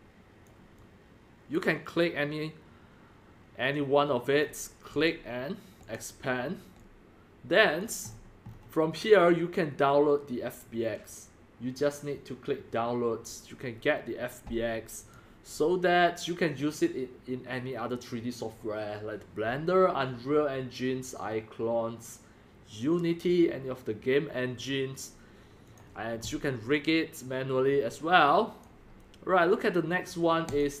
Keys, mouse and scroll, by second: 0.8-4.4 drag, 4.9 click, 5.8 click, 7.8 drag, 8.0 middle click, 8.0 scroll, 8.2 scroll, 8.6 scroll, 10.6-13.4 drag, 13.4 scroll up 10, 13.6 drag, 15.1 click, 15.4 click, 15.6 drag, 20.2 click, 25.7-26.8 drag, 26.9 click, 27.2-28.0 drag.